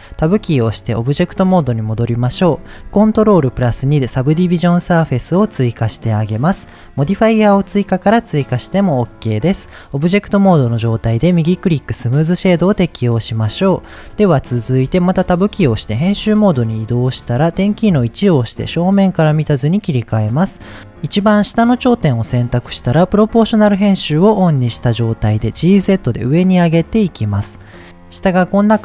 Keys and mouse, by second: 0.2 Tab, 0.8-1.5 middle drag, 3.4 ctrl+2, 8.9 click, 11.3 right click, 12.3-13.6 middle drag, 14.7 Tab, 15.7-16.1 shift+middle drag, 17.9 KP_1, 23.1 click, 25.6 g, 25.8 z.